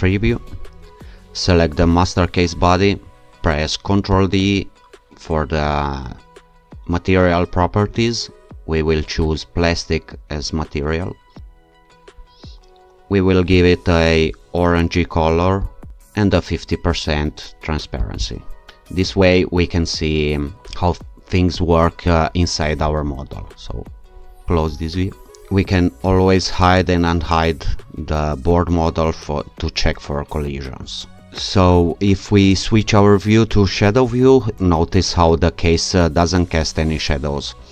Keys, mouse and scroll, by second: 0.3 click, 1.9 click, 4.1 ctrl+d, 9.2 click, 11.4 click, 13.5 click, 15.6 click, 18.0 click, 24.5 click, 26.1 click, 31.6 q.